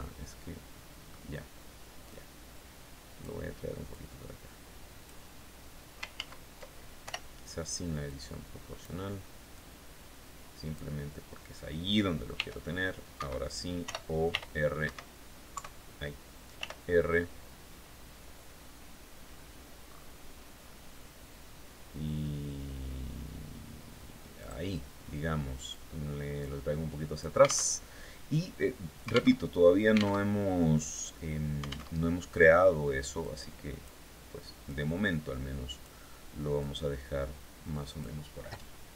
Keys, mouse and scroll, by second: 1.5-2.8 drag, 3.3-4.7 drag, 5.6 ctrl+z, 6.5 ctrl+o, 7.5 click, 9.0-10.4 drag, 11.8 r, 12.6 Escape, 13.7 r, 14.3 Escape, 15.0 KP_3, 16.0 r, 18.7-19.0 scroll up 2, 19.3-19.6 scroll down 2, 20.0-20.3 scroll down 2, 21.8 scroll down 2, 23.8 click, 25.1-26.8 drag, 27.1 alt+Tab, 28.8 alt+Tab, 29.7 alt+Tab, 31.4 alt+Tab, 32.7 click, 34.1-35.5 drag, 36.0-37.7 drag.